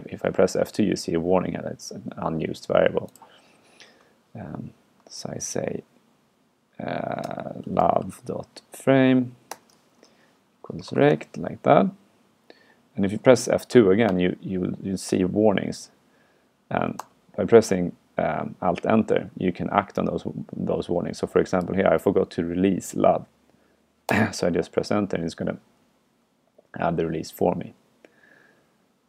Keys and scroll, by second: 4.0 super+Right, 5.1 alt+8, 17.0 alt+Return.